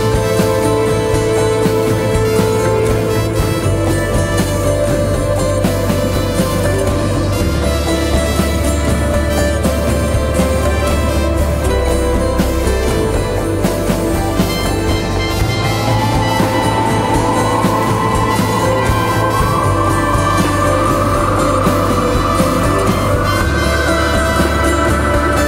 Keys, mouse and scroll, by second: 15.9 double click, 22.7 double click.